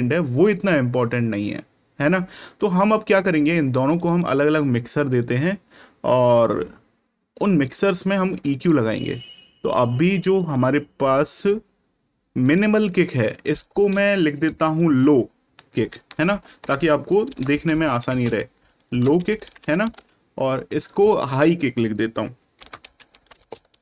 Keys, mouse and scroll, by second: 4.0 click, 7.6 click, 12.4 click, 14.6 shift+click, 15.7-19.9 typing, 21.3 shift+click, 22.3-23.8 typing.